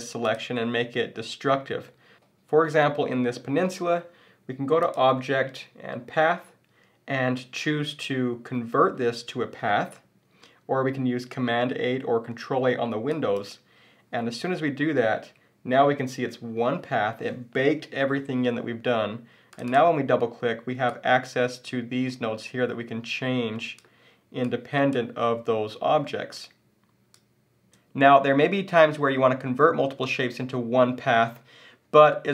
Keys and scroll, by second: 27.6 super+z.